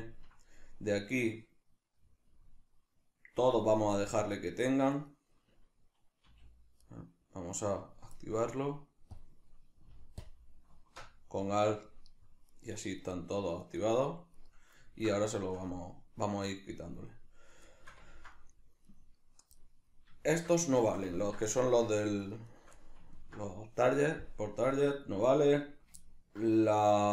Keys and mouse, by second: 4.9 right click, 6.3 a, 6.9-9.1 middle drag, 9.1 drag, 10.2 alt+click, 12.5 right click, 13.1 right click, 13.6 right click, 14.4 right click, 14.9 ctrl+middle drag, 15.2-18.9 shift+middle drag, 18.9 right click, 19.6-20.3 middle drag, 20.3 shift+right drag, 20.7-22.3 shift+middle drag, 22.3 shift+right click, 22.5 shift+right click, 22.8-27.1 middle drag.